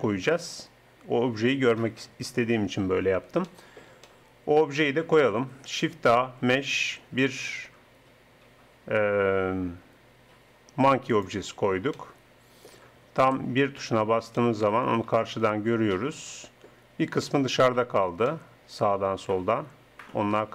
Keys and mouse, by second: 3.5 middle click, 5.9 shift+a, 13.2 KP_1, 16.4 middle click, 17.1-19.4 middle drag, 20.0-20.5 middle drag.